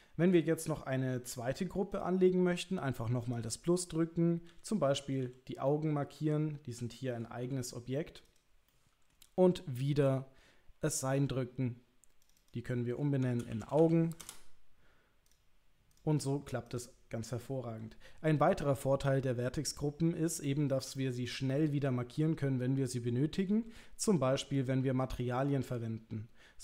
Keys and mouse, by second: 1.9 click, 3.2 click, 5.2 l, 5.7-7.2 middle drag, 7.4 g, 8.7 middle click, 11.1 click, 12.2 click, 12.4-14.7 drag, 15.3 click, 15.9 click, 20.5 shift+middle click, 21.0-23.5 middle drag.